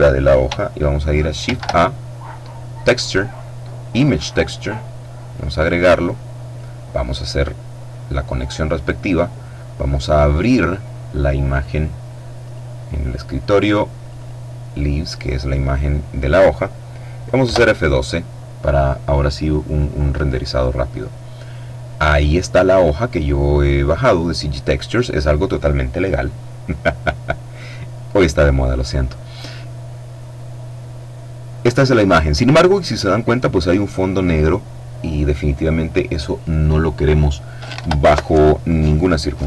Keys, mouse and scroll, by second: 0.9 shift+a, 3.9 click, 4.8-6.5 drag, 6.8-8.4 drag, 9.4 click, 11.9 click, 13.5 click, 16.9 F12, 30.0-30.5 scroll up 2, 30.5-31.0 scroll down 2, 31.2-31.8 scroll down 2.